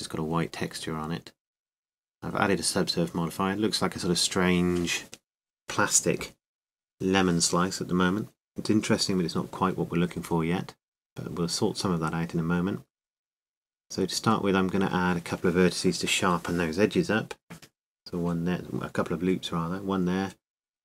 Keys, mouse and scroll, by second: 4.9-6.8 middle drag, 12.8-15.1 drag, 14.0-17.4 middle drag, 14.3 Tab, 18.1 ctrl+r.